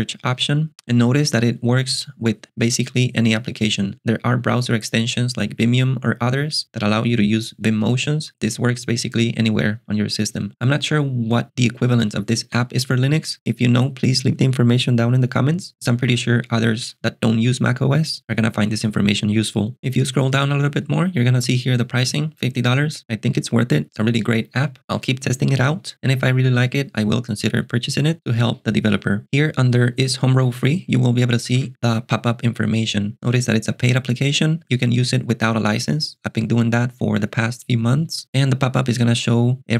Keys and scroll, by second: 0.7 j, 31.0 alt+super+BackSpace, 31.2-32.1 typing.